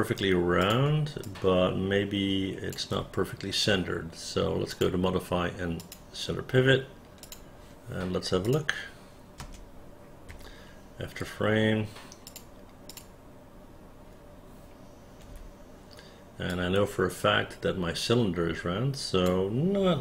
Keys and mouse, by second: 0.7 click, 1.4-2.9 alt+drag, 7.4 click, 8.6 click, 9.5 space, 10.5 f, 12.4 click, 13.0 click, 15.4 w, 16.6-19.4 drag.